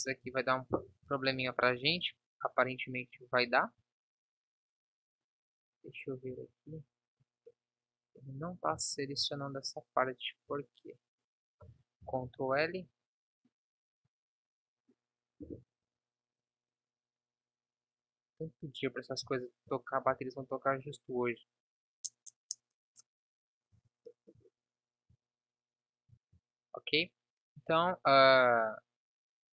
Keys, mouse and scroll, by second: 0.7 ctrl+n, 6.4 Tab, 10.5 Tab, 12.0 ctrl+l, 15.8 KP_7, 17.3 s, 20.0 ctrl+s, 20.7 KP_1, 23.8 z, 24.4 z, 25.1 Tab, 26.3 ctrl+s.